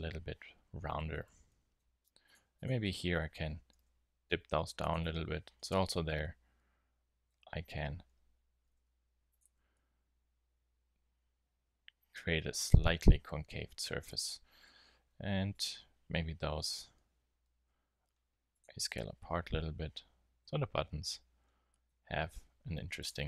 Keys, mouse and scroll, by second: 1.1 Tab, 3.7 g, 5.0 Tab, 7.4 Tab, 8.6 g, 9.3-10.9 drag, 9.4 Tab, 14.1 Tab, 14.7 z, 17.5 s, 18.6 z, 19.0 Tab, 22.4 Tab.